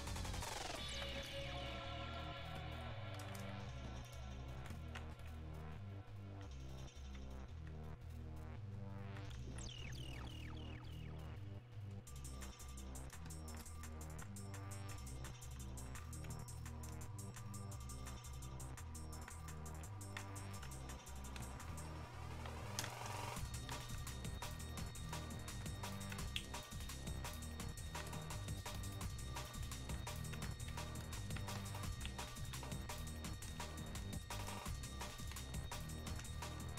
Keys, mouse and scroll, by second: 1.2 alt+click, 3.9 shift+click, 4.9-15.1 alt+drag, 16.6-23.5 ctrl+drag, 30.2 ctrl+click, 33.0-35.3 ctrl+drag, 35.3 ctrl+space.